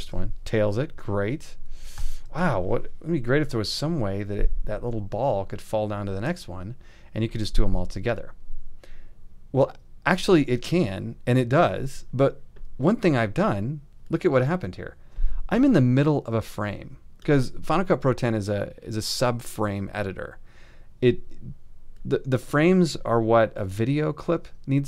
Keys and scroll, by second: 2.0 alt+].